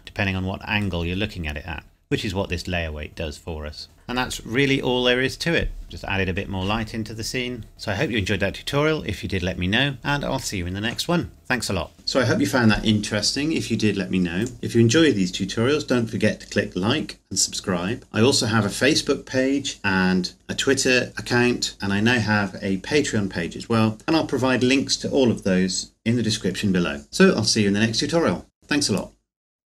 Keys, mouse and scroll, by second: 1.2 scroll up 1, 3.8 scroll up 1, 4.0 scroll down 1, 5.8 scroll up 1.